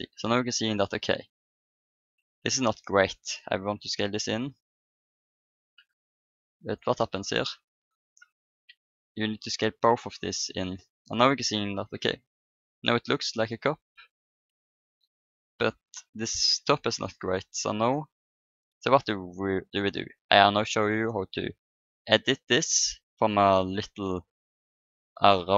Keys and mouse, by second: 3.5 s, 7.7 right click, 8.5 click, 8.5 s, 10.1 s, 10.7 Tab, 11.9 KP_1, 13.0 click, 14.2 Tab, 21.6 middle click.